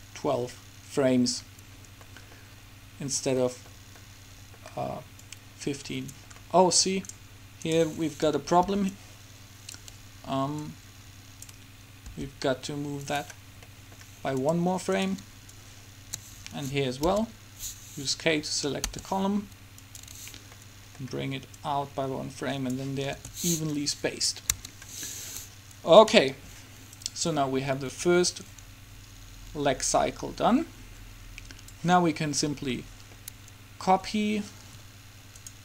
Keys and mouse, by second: 5.4-7.3 drag, 8.8 right click, 8.8 b, 10.8-12.5 drag, 12.2 g, 13.8-17.6 drag, 17.3 k, 19.0 g, 21.8-23.5 drag, 23.3 alt+a, 24.7 Escape, 32.9-35.5 middle drag, 35.5-35.6 right drag.